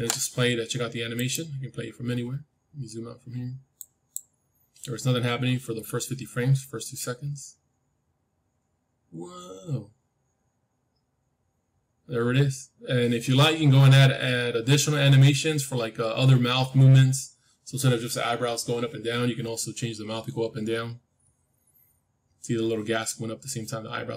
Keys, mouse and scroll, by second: 1.1-3.1 drag, 2.6-5.0 middle drag, 3.7-5.7 drag.